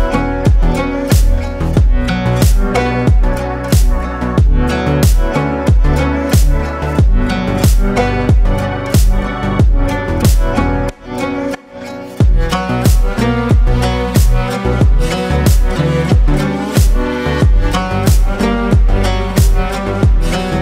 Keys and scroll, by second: 1.5 Delete.